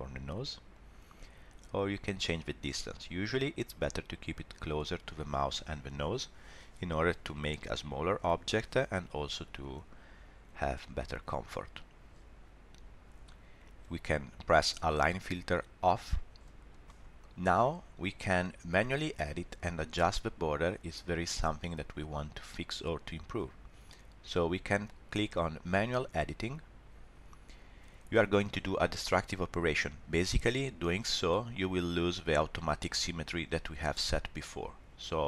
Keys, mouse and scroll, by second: 0.7 click, 15.8 click, 16.8 middle click, 26.4 click.